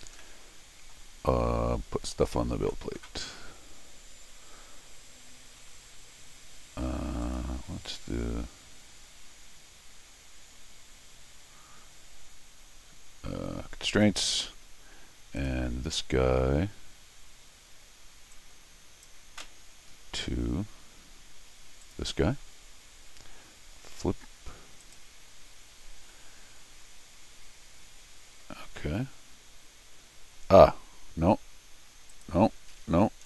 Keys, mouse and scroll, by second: 0.2 middle click, 1.5 middle click, 7.2 click, 7.9 click, 13.9 click, 14.4 scroll down 1, 15.4 click, 18.3 click, 19.9 middle click, 20.2 middle click, 21.8 click, 24.8 click, 32.1 click.